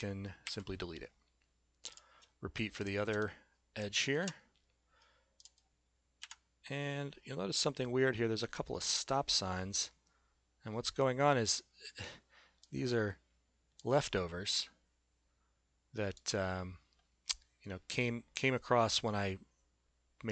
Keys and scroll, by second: 0.4 Delete, 4.2 p, 6.2 Delete.